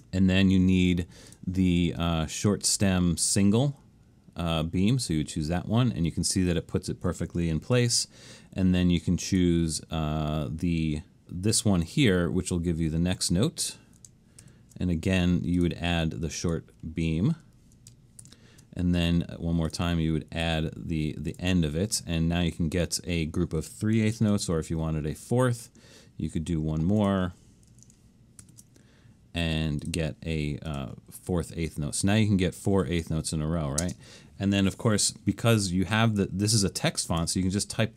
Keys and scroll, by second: 7.8 alt+shift+super+s, 14.5 alt+shift+super+s, 18.3 alt+shift+super+s, 24.2 alt+shift+super+s, 28.5 alt+shift+super+s, 33.8 space.